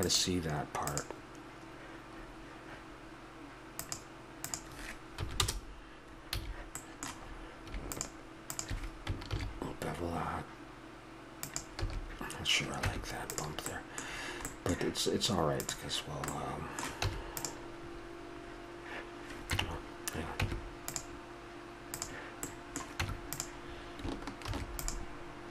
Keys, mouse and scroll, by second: 3.8-6.3 drag, 6.4 a, 6.8-9.1 middle drag, 9.1 click, 9.3 ctrl+b, 11.8 a, 12.9 Tab, 13.7-14.2 middle drag, 16.6 middle click, 17.0 Tab, 19.5 Tab, 20.4 Tab, 23.0 Tab, 24.5 ctrl+r.